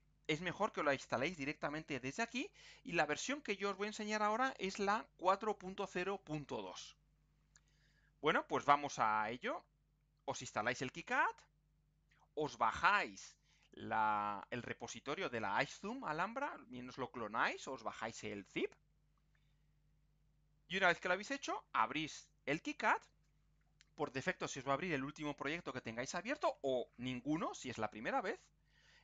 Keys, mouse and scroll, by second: 13.5 click, 14.4 click, 20.8 click.